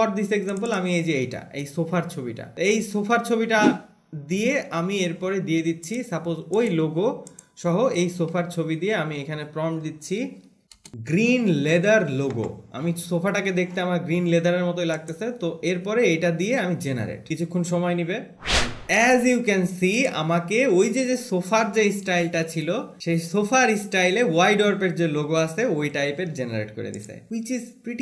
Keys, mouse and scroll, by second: 0.7 scroll, 0.9 click, 3.4 alt+`, 18.5 click, 23.0 click, 27.3 click.